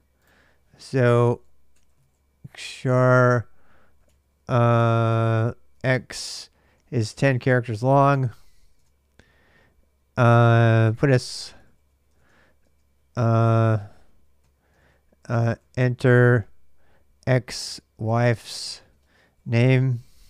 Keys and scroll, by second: 0.9-7.8 typing, 7.9 Return, 8.5 alt+Tab, 10.3-20.2 typing.